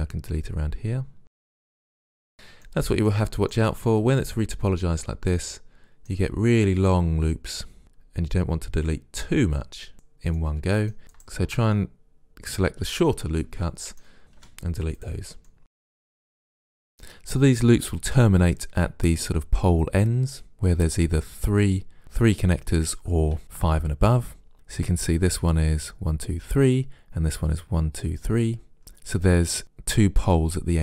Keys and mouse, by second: 1.6 right click, 2.1-5.6 middle drag, 8.0-13.5 middle drag, 14.4 Delete, 15.5 middle click.